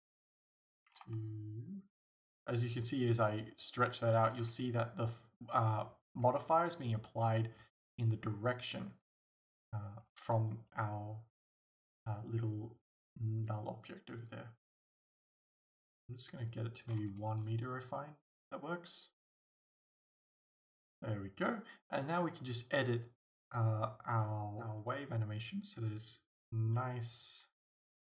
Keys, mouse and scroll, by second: 19.7 scroll down 1, 20.3 scroll up 1, 20.9 scroll up 1.